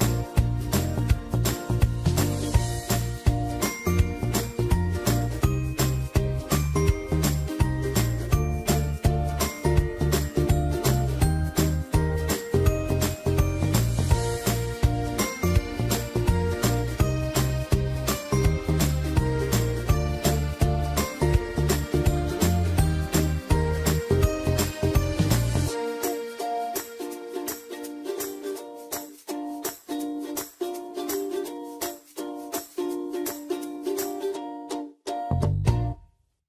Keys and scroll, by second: 9.1 space, 13.2 space, 36.2 alt+shift+Delete.